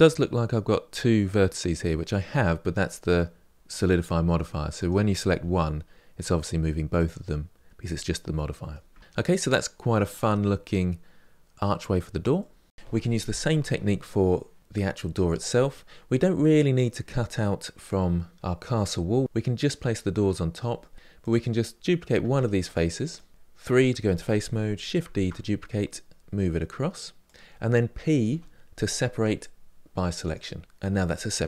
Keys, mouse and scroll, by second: 4.6 click, 5.1 g, 8.1-9.2 middle drag, 9.2-9.9 scroll down 3, 9.9 middle click, 10.2 Tab, 10.6-11.1 scroll down 2, 11.1 middle click, 11.8-12.3 scroll down 3, 12.3-14.2 middle drag, 21.0 click, 22.2 Tab, 22.8 click, 24.9 shift+d, 28.0 p.